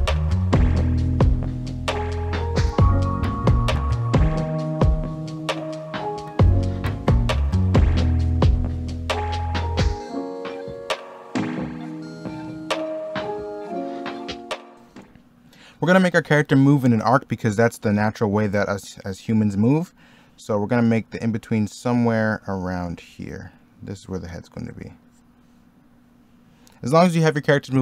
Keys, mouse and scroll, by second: 0.0-5.4 typing, 5.9 ctrl+z, 6.6-11.8 typing, 9.9 middle click, 10.1 middle click, 12.4 ctrl+z, 12.7 middle click, 12.9-14.1 typing, 13.4 middle click, 14.2 ctrl+z, 16.3 middle click, 18.3 ctrl+z, 21.1 ctrl+z, 23.5 ctrl+z.